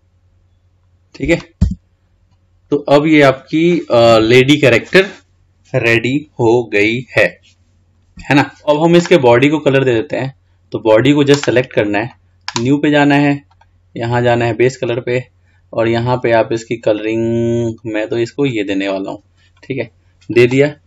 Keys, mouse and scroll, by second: 1.8 Tab, 2.1 scroll down 3, 3.1-3.6 scroll up 2, 3.6 scroll down 1, 4.5 scroll down 1, 4.9-7.9 scroll up 2, 8.2-8.7 scroll down 2, 8.7-9.3 drag, 10.0 click, 12.2-13.8 drag.